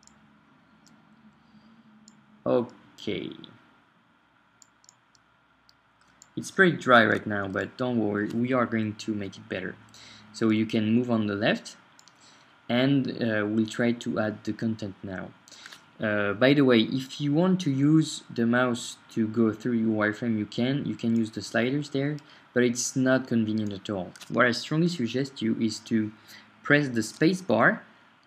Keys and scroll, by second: 0.0-0.2 typing, 6.7 shift+Right.